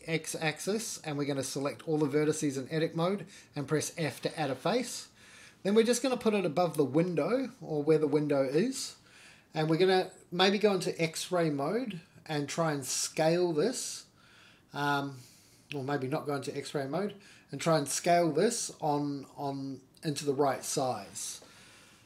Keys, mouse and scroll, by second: 0.4 scroll down 3, 0.7 f, 1.7 Tab, 3.0 alt+z, 4.4 shift+middle click, 5.4 s, 8.4 alt+z, 10.7 g, 14.4 middle click, 14.4-14.9 scroll down 4, 14.9 g, 18.9-19.6 middle drag, 19.8 middle click, 21.1 KP_1.